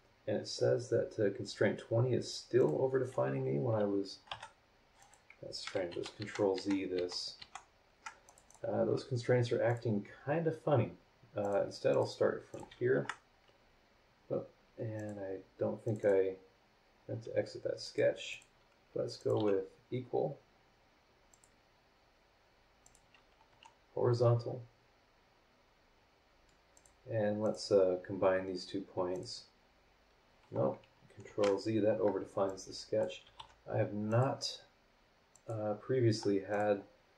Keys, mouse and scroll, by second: 0.8-1.5 scroll down 3, 2.6 click, 4.3 Delete, 5.0 click, 5.9 ctrl+z, 8.3 ctrl+click, 9.7 click, 11.4 click, 11.9 click, 12.5 click, 12.9 Escape, 14.0 scroll down 2, 14.9 click, 15.8 click, 16.5 scroll down 2, 16.9 scroll up 2, 17.8 click, 18.3 click, 19.2 click, 19.4 e, 21.3 click, 22.8 click, 23.5 h, 26.7 click, 27.4 click, 29.1 click, 31.3 ctrl+z, 32.5-33.2 drag, 33.1-33.9 typing, 34.1 click, 35.3 click, 36.5 click.